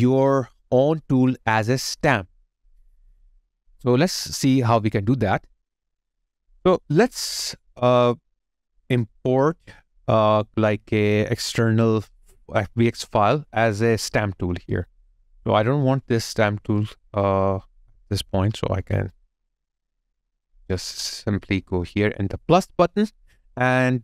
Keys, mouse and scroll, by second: 6.7 alt+click, 10.7 alt+middle click, 11.0 alt+click, 11.6 alt+right click, 12.0 alt+middle click, 18.5 Delete.